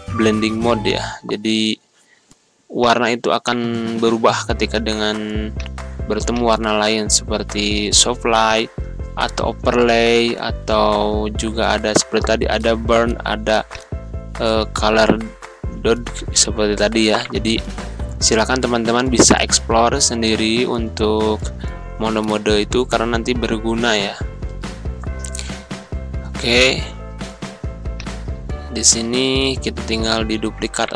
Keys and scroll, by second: 25.4 Delete.